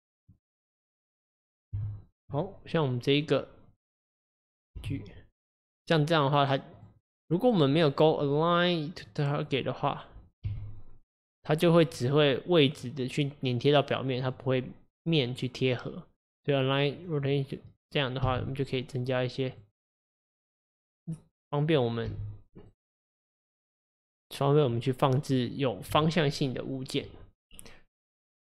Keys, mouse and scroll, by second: 0.9 click, 1.8 g, 2.4-4.8 middle drag, 4.8 g, 7.8-10.5 drag, 10.5 g, 15.4-18.3 drag, 18.3 g, 20.4-21.8 right drag, 21.8 click, 22.2 g, 23.5 click, 24.8 middle click, 25.7-28.5 scroll down 1.